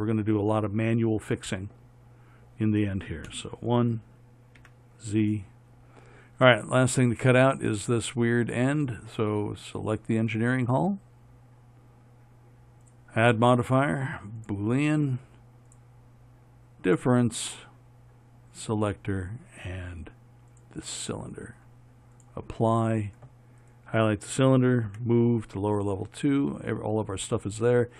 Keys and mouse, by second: 3.6 KP_1, 4.9 z, 8.4 z, 10.0-14.8 right drag, 14.8-25.2 drag, 23.9-26.5 right drag, 25.2 m.